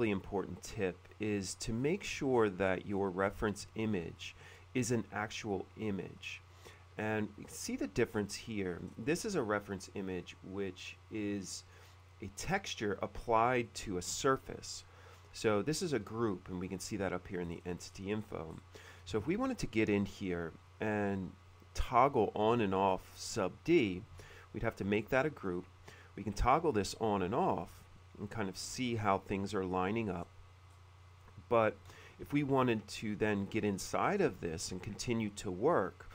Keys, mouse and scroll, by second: 0.4 click, 1.6 middle click, 2.7 middle click, 3.8 space, 4.4 shift+middle click, 6.3 click, 6.8 middle click, 7.2 middle click, 8.2 middle click, 8.4 scroll up 1, 9.0-9.4 scroll up 1, 9.2 middle click, 10.3 click, 11.0 click, 11.3 click, 11.9 click, 13.8 middle click, 14.5-14.9 scroll up 1, 14.9 middle click, 17.5 middle click, 18.0-22.8 middle drag, 19.2 space, 22.8 click, 23.0 click, 23.1 click, 24.2 shift+g, 26.5 click, 27.1 click, 27.6 click, 30.3 middle click, 30.8 middle click, 30.8-31.1 scroll up 1, 32.3 shift+middle click, 33.1 click, 34.0 click, 34.3 click, 35.8 middle click.